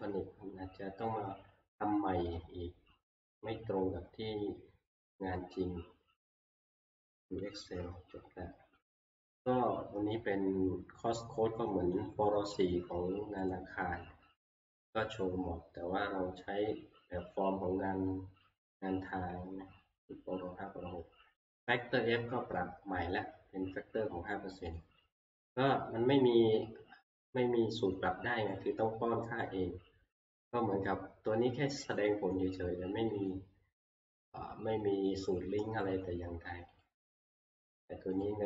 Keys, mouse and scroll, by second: 7.5 click, 12.1 click, 13.5 click, 21.5 click, 22.7 scroll, 24.8 click, 28.6 click, 29.8-38.4 drag.